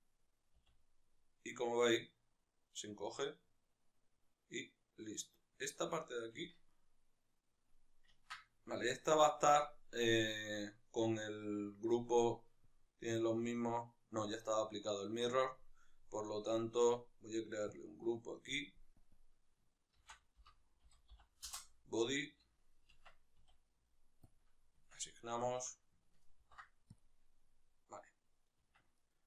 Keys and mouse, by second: 0.6 s, 5.7 click, 6.5 Tab, 6.7-8.2 right drag, 8.2-18.6 ctrl+shift+middle drag, 18.6 click, 21.5-25.5 drag, 21.6 Return, 23.1 Tab, 24.9 Tab, 25.5-27.1 shift+right drag, 27.1 ctrl+p, 29.0-29.2 right drag.